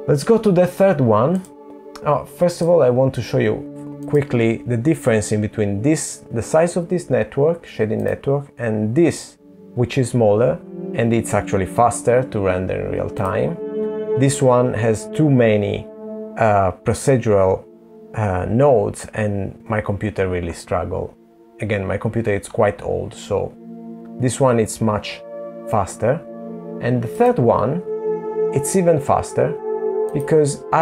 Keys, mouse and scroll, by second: 0.6 click, 7.3 click, 17.0 click, 21.4 click, 23.8 click, 24.2 click, 29.4 click.